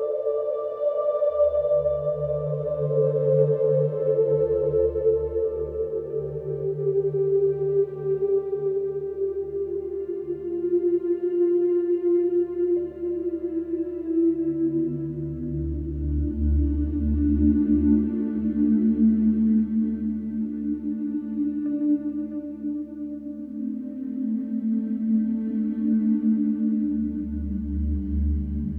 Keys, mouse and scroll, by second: 3.5 alt+middle click, 4.3 scroll up 2, 4.8 shift+middle click, 5.4 g, 7.5 click, 10.1-10.7 scroll up 1, 10.7 g, 12.0-13.5 shift+middle drag, 14.0 ctrl+r, 16.8 click, 18.0 click, 20.3 middle click, 20.8 scroll down 2, 21.2-22.4 middle drag, 22.4 click, 22.8 click, 23.5 shift+click, 23.8 shift+click, 24.1 shift+click, 24.4-25.9 middle drag, 26.3 ctrl+b.